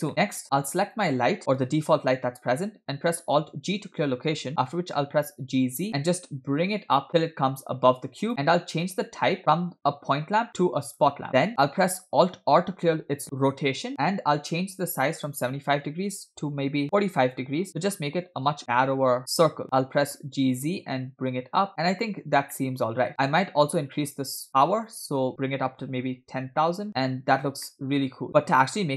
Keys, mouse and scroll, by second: 0.4 scroll up 1, 1.0 click, 3.7 alt+g, 4.6 g, 8.9 click, 11.0 click, 12.6 alt+r, 15.2-17.7 drag, 18.6-19.2 middle drag, 20.2 g, 22.6-23.1 middle drag, 23.1-24.4 scroll up 2, 24.5-26.7 drag, 27.1-27.7 scroll down 1, 27.7 scroll down 1, 27.7-28.6 middle drag, 28.3 scroll up 2, 28.6-28.9 scroll down 2.